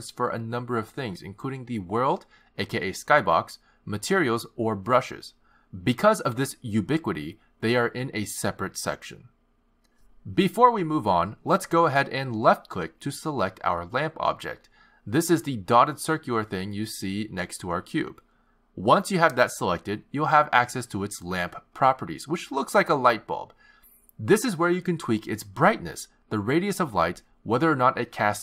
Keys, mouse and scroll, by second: 7.3 click, 10.6 click, 14.1 click, 23.7 click, 25.7 click, 26.9 click.